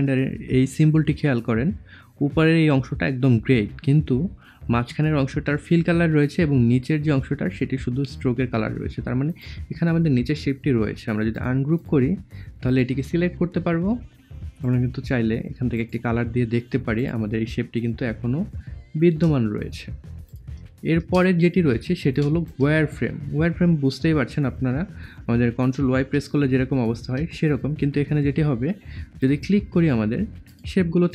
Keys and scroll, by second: 25.9 ctrl+y.